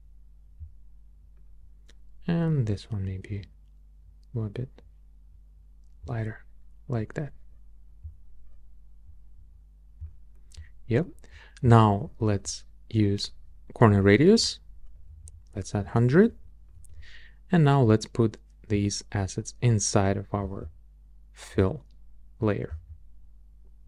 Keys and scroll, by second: 14.7-15.6 typing, 15.8 Return.